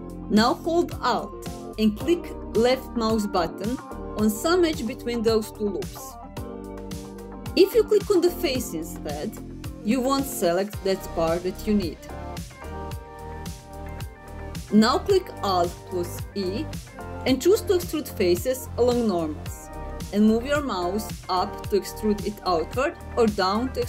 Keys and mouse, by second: 5.5 alt+click, 9.7 alt+click, 13.3 alt+click, 14.5 middle click, 16.4 alt+e.